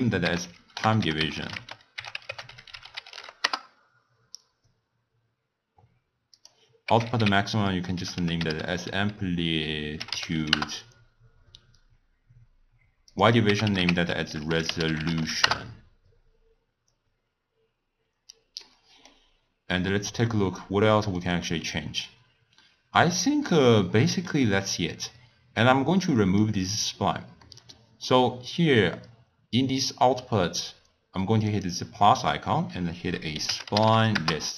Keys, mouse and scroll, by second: 6.4-9.4 drag, 13.1-17.6 drag, 18.6-21.8 middle drag, 21.8 click, 23.8-25.6 middle drag, 25.6 drag, 27.4-31.1 middle drag, 31.5-34.5 drag.